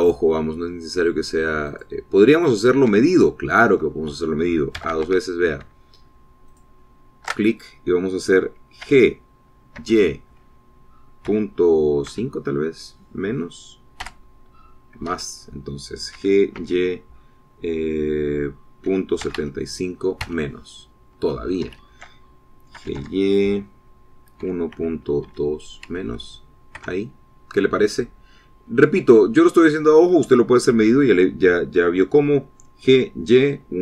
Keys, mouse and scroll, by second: 3.1 click, 3.1 right click, 3.9-4.3 scroll up 1, 4.5-6.7 shift+middle drag, 6.1 a, 7.9 alt+shift+click, 10.2 g, 11.2 y, 12.6 KP_Decimal, 13.5 KP_5, 15.4 KP_Subtract, 16.5 Escape, 17.5 g, 18.0 y, 20.3 KP_Decimal, 20.7 KP_7, 20.7 KP_5, 21.6 KP_Subtract, 23.0 Escape, 24.2 g, 24.4 y, 25.8 KP_1, 26.2 KP_Decimal, 26.7 KP_2, 27.3 KP_Subtract, 28.2 KP_Enter, 29.9-30.3 scroll down 4, 30.8-31.1 scroll up 2.